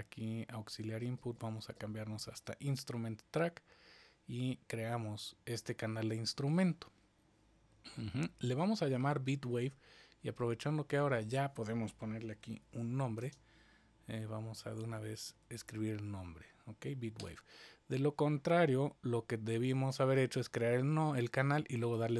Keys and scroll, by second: 0.7 super+Down, 0.9 super+Down, 1.1 super+Down.